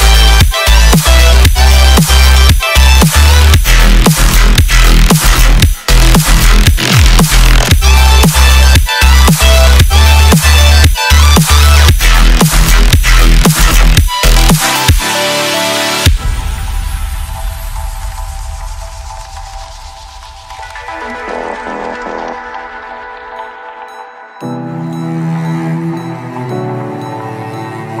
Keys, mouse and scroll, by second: 2.8-3.2 scroll up 2, 3.2-3.6 scroll down 13, 5.0 scroll down 16, 5.0-6.7 middle drag, 6.7 click, 11.8 right click, 12.6-13.6 scroll down 2, 13.6-15.6 scroll down 1, 15.6-17.6 drag, 18.2 click, 18.7 click, 19.4-20.2 scroll up 11, 20.2-20.6 scroll down 3, 20.6 space, 26.8 space, 27.6 ctrl+z.